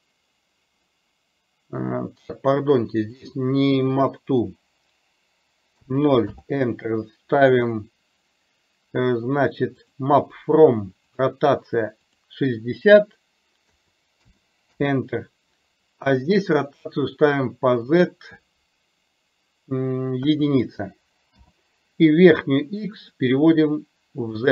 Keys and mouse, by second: 3.2-6.3 drag, 10.0 click, 11.2 click, 12.2-14.8 drag, 17.8-21.4 drag, 23.1-24.5 drag.